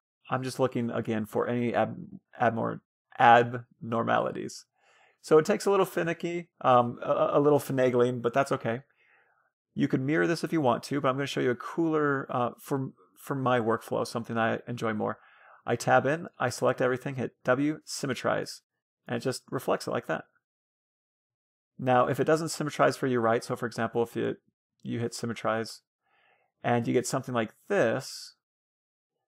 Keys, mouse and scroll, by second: 3.6-5.1 middle drag, 5.7-6.5 scroll down 1, 6.5-7.0 scroll up 1, 7.0-8.6 drag, 10.2 scroll up 1, 10.5-11.8 middle drag, 11.8-13.4 drag, 12.1 Tab, 13.5 Tab, 14.4-15.9 drag, 15.0 Tab, 15.4 a, 15.9 a, 16.1 w, 18.2 Tab, 18.5-20.2 middle drag, 22.2 ctrl+z, 22.8 Tab, 23.1 a, 23.5 a, 23.7 q, 24.6 w, 26.2-27.7 drag, 27.9-29.2 drag.